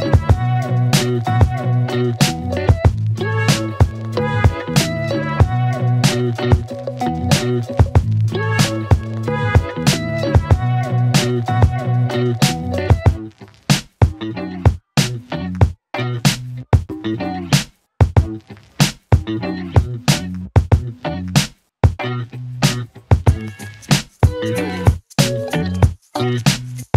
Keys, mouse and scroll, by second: 2.5 click, 6.7-7.5 click, 10.4 F9, 12.9 alt+Num_Lock, 14.9 alt+click, 16.9 click, 19.5 click.